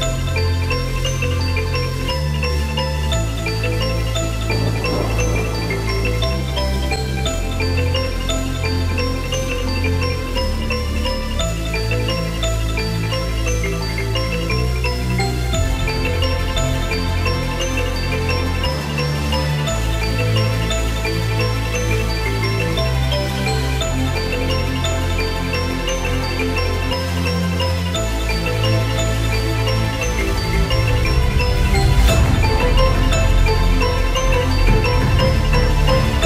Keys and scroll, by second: 25.4 ctrl+g, 29.7 BackSpace, 30.7 Return.